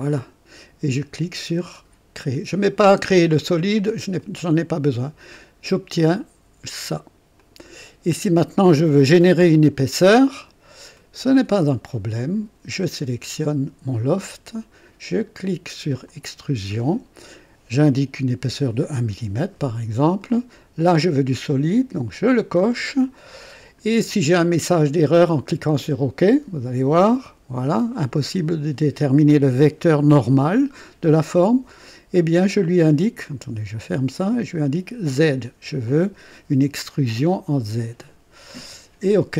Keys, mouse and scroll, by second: 0.0 click, 4.2 click, 5.3-7.4 drag, 7.6 click, 8.3-11.2 drag, 12.2 click, 16.0 click, 18.4 KP_1, 20.3 click, 22.1 click, 23.2-24.0 drag, 26.9 click, 33.8 click, 35.0 click, 38.5 click.